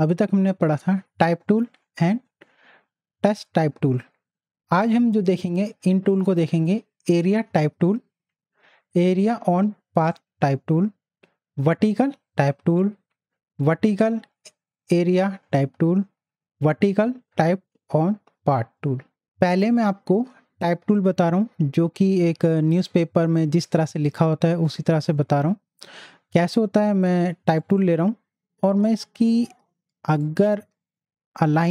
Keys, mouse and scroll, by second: 26.4 right click, 27.6 click, 30.2-31.7 drag.